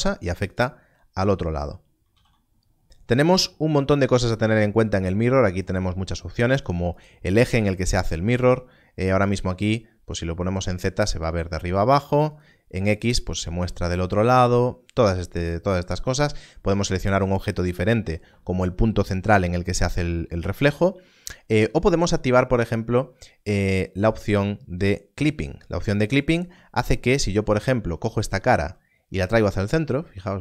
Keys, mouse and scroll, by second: 0.5 right click, 2.1 alt+a, 6.5 alt+a, 12.3 click, 24.2-24.5 scroll up 1, 24.5-26.3 scroll down 1, 26.3 click, 30.1 click.